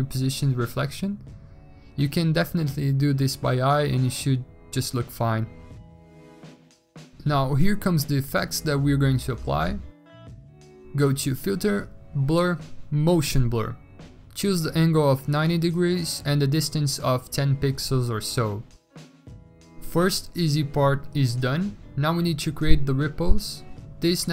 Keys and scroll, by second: 15.7-16.0 typing.